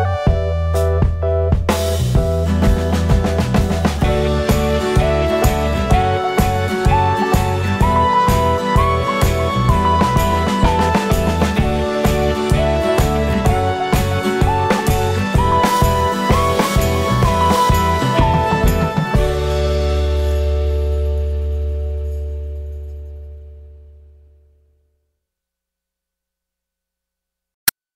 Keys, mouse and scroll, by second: 0.9 ctrl+click, 6.7 alt+middle click, 7.9 ctrl+click, 10.1 middle click, 11.1 middle click, 14.3 ctrl+click, 18.3 ctrl+click, 21.8 F3, 22.8 alt+middle click, 23.5 alt+middle click, 23.8 alt+middle click, 24.2 scroll up 1, 24.4 middle click, 25.5 F3, 25.9 middle click, 26.3 middle click, 27.5 alt+click.